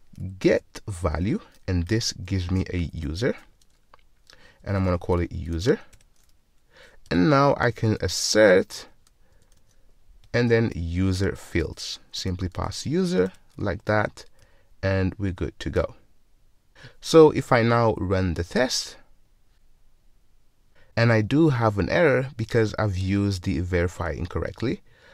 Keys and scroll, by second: 3.2 alt+super+v, 11.4 Return, 13.3 Return.